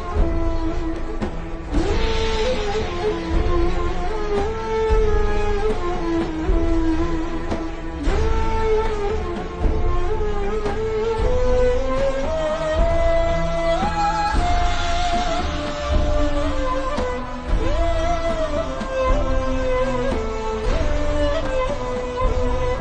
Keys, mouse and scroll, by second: 0.2 click, 7.6-8.0 scroll down 1, 8.0 click, 10.8-11.1 alt+shift+scroll down 2, 11.1 click, 11.5 alt+scroll down 2, 11.7 scroll up 1, 12.0 click, 13.6 ctrl+g, 13.9 click, 15.5-16.0 scroll down 1, 16.0 click, 18.5 alt+shift+scroll down 2, 18.9-19.2 ctrl+scroll up 2, 19.2-19.7 scroll down 1, 19.7 click.